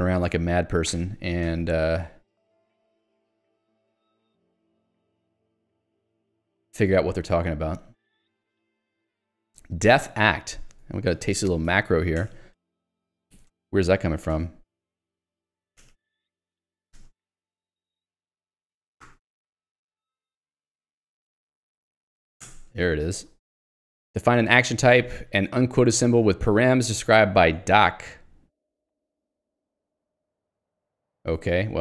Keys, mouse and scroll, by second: 0.3 Escape, 0.9 ctrl+u, 3.6 g, 4.4 ctrl+d, 8.9 ctrl+u, 10.7 Escape, 11.1 ctrl+g, 12.7-15.9 typing, 16.3 Escape, 17.3 ctrl+f, 17.3-21.6 typing, 22.6 Return, 23.0 Escape, 23.5 j, 25.3 k, 25.9 l, 27.5 j, 28.2 ctrl+alt+', 30.4 Escape, 30.6 j.